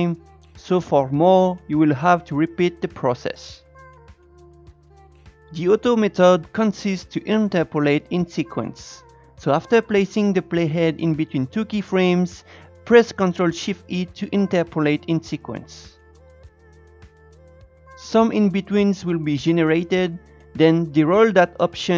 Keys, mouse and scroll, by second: 3.0 click, 4.9 Tab, 17.2 ctrl+shift+e.